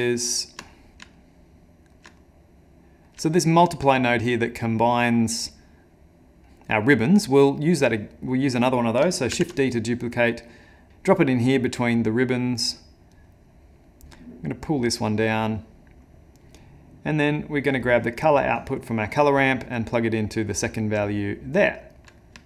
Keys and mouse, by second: 0.1 ctrl+middle click, 0.7 middle click, 0.9 ctrl+z, 1.2 ctrl+middle click, 2.2 middle click, 3.3 ctrl+middle click, 4.0 middle click, 4.4 middle click, 6.8 middle click, 7.4 middle click, 8.3 click, 9.3 shift+d, 10.9 ctrl+z, 11.1 click, 13.1 click, 15.3 click, 17.8 click, 21.1 click, 21.6 click, 22.0 middle click.